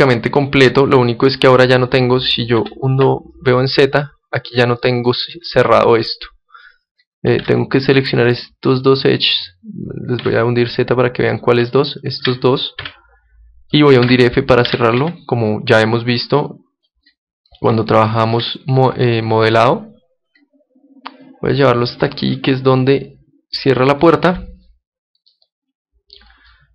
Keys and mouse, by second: 2.6 z, 3.1 z, 7.8 ctrl+Tab, 9.4-10.5 right drag, 10.2 z, 11.2-13.7 right drag, 12.8 z, 13.7 middle click, 14.0 f, 14.7 Tab, 15.0 Tab, 16.2-17.9 drag, 17.9 middle click, 20.4 click, 24.3 Tab, 24.7 click, 25.3-26.7 middle drag.